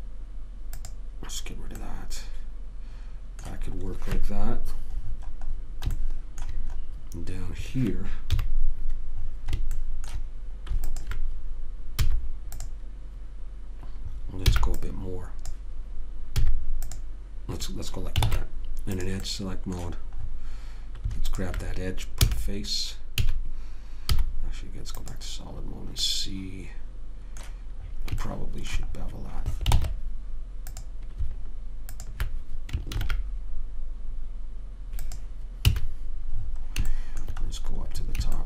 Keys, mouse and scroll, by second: 6.3-8.6 middle drag, 8.6 KP_3, 11.2 click, 12.3 x, 14.9 b, 16.8 x, 18.6 ctrl+Tab, 21.6 middle click, 22.5 f, 23.5 a, 24.5 z, 26.4-30.1 middle drag, 30.1 ctrl+Tab, 32.2 click, 33.2 ctrl+b, 36.0 a.